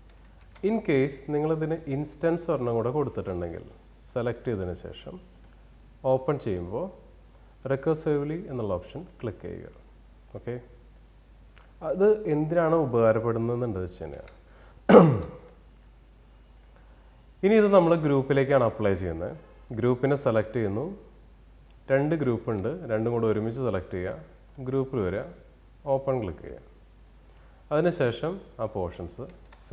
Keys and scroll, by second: 0.1 ctrl+z, 13.7 ctrl+z.